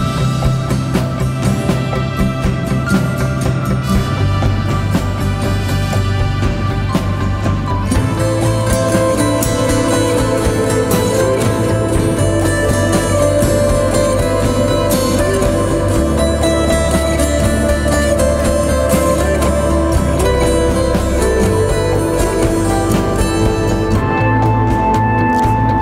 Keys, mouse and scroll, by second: 0.1 alt+shift+click, 2.9 right click, 3.8 click, 8.9 ctrl+z, 9.6-11.8 drag, 14.2 right click, 14.9 click, 17.3-17.7 scroll down 1, 18.8 z, 19.0 click, 19.2 space, 19.3 click.